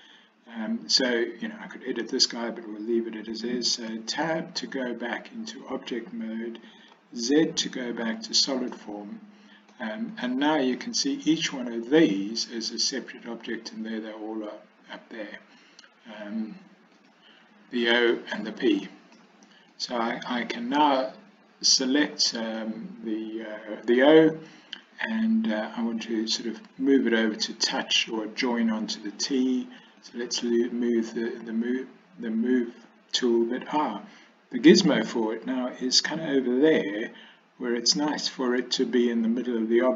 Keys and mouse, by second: 3.9 Tab, 7.0 z, 8.8-9.8 middle drag, 10.3 click, 10.8 click, 11.5 drag, 12.1 click, 17.1 click, 18.0 click, 18.9 middle click, 19.9 click, 22.6-24.1 middle drag, 30.1 click.